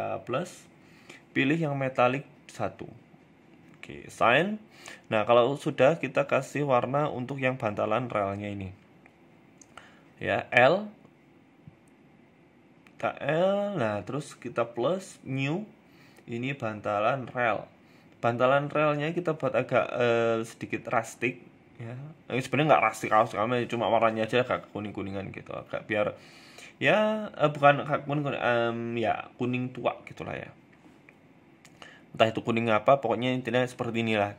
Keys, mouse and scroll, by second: 0.1 click, 2.1 scroll down 3, 2.3 middle click, 2.8-4.1 scroll down 7, 3.5 middle click, 4.2 middle click, 4.4 Tab, 4.8 middle click, 4.8 scroll up 1, 5.2 shift+middle click, 5.5 scroll up 2, 5.9 middle click, 6.5-7.2 scroll down 3, 6.8 middle click, 7.3 scroll up 1, 7.6 right click, 9.0 Tab, 10.1 l, 10.8 a, 10.9 a, 11.1 l, 11.6-12.1 scroll down 3, 11.8 shift+middle click, 12.3-13.4 scroll up 3, 12.7 middle click, 14.0 click, 14.5 click, 14.7 click, 17.6 click, 20.8 click, 21.3 Tab, 21.4 scroll down 1, 22.7 scroll down 3, 23.7 click, 29.8 Tab, 30.2 Tab, 30.3 middle click, 30.8 shift+middle click, 31.1 middle click, 31.6 shift+middle click, 31.9 middle click, 32.8 middle click, 33.5 scroll up 2, 33.7 shift+middle click, 34.1-34.3 scroll up 1.